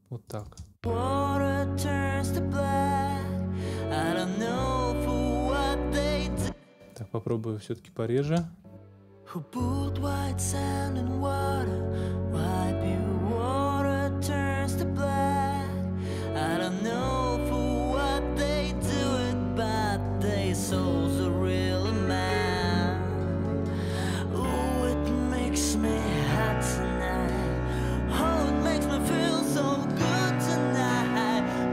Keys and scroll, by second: 0.4 space, 6.2 space, 8.2 space.